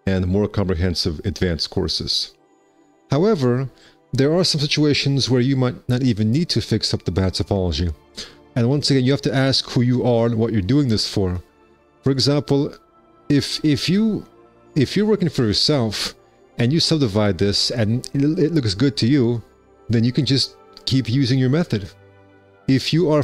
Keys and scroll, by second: 2.5 1, 12.9 F4.